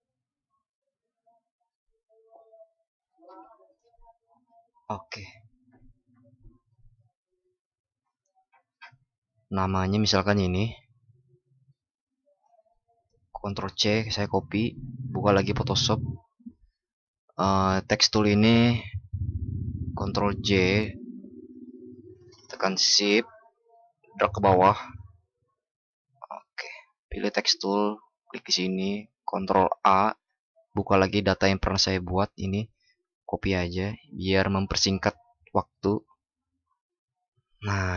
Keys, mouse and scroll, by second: 13.5 ctrl+shift+b, 20.4 ctrl+shift+i, 29.4 ctrl+shift+@, 33.1 ctrl+shift+b.